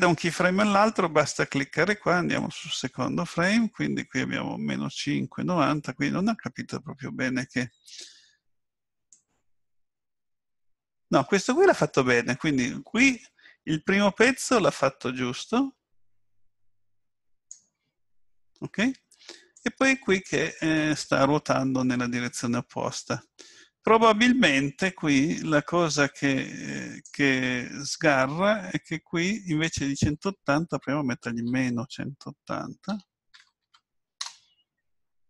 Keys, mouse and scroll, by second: 2.3 click, 9.1 click, 19.5 click, 29.5 click.